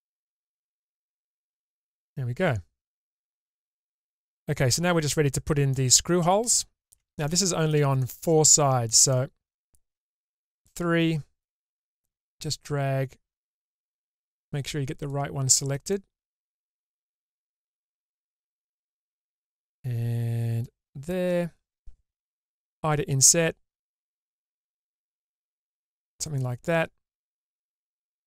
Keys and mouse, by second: 1.2-3.2 middle drag, 4.8 Tab, 5.9-7.1 middle drag, 8.2 middle click, 9.4 shift+middle click, 10.8 3, 11.8 click, 15.2 shift+click, 16.1 middle click, 17.4 shift+middle click, 18.3 shift+click, 20.8 shift+click, 23.0 i, 27.5 n.